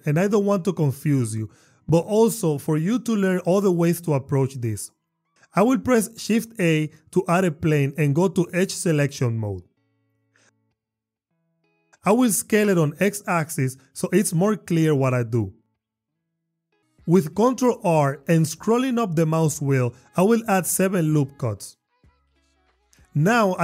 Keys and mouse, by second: 6.7 shift+a, 9.4 Tab, 11.5 s, 11.7 x, 14.3 click, 16.9 ctrl+r, 22.3 click, 22.4 click, 22.6 Tab.